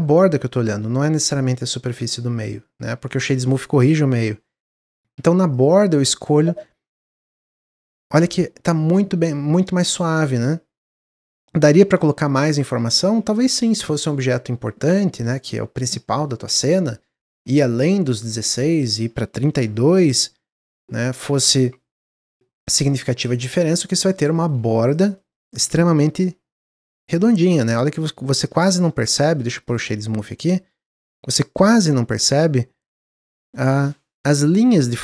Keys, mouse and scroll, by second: 5.1 Tab, 5.4 click, 6.5-6.9 middle drag, 6.9-7.5 shift+scroll up 1, 7.5 shift+middle click, 7.5-8.4 scroll up 2, 10.3 click, 10.8 Tab, 11.9 ctrl+z, 12.6 ctrl+z, 13.0 ctrl+z, 13.5-13.8 scroll down 3, 14.1-15.8 middle drag, 15.8 scroll down 1, 15.9 middle click, 16.2 Tab, 16.9 ctrl+z, 17.3 ctrl+z, 17.8 middle click, 18.2 ctrl+z, 19.4 ctrl+b, 21.2-23.3 drag, 23.5 Tab, 23.7-24.3 scroll up 5, 24.3 shift+middle drag, 24.8 click, 25.1-28.1 middle drag, 28.6 middle drag, 28.9 click, 29.2-30.3 right drag, 30.3 click, 30.6 drag, 31.7 click.